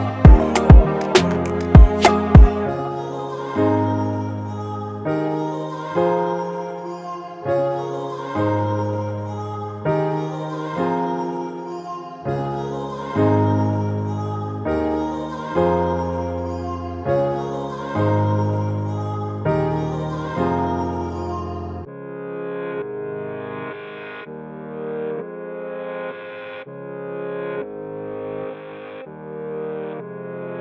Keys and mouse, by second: 6.2 right click, 7.4 click, 9.7 click, 10.8-17.2 alt+shift+drag, 17.5 click, 17.7 click, 19.3 click, 20.0 Down, 22.1 click, 24.7 click, 25.8 Up, 28.3 click, 29.7 Down.